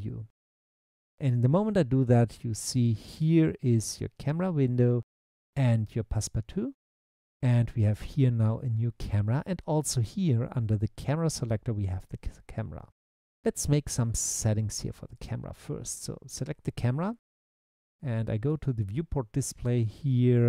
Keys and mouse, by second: 0.5 click, 15.2 click, 18.5 click.